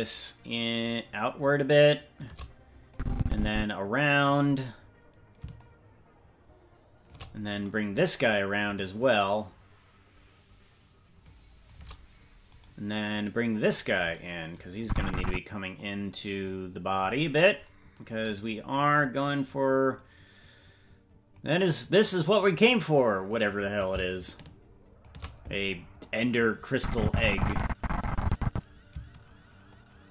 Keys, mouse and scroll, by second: 2.9-4.3 drag, 5.5-7.1 shift+drag, 7.6 right click, 9.0-11.7 shift+drag, 12.6 right click, 14.8-15.8 drag, 17.1-18.6 scroll down 4, 18.6-19.8 scroll down 2, 19.9-21.3 drag, 22.6 click, 24.2 shift+click, 26.7-28.5 drag, 29.6-30.1 shift+drag.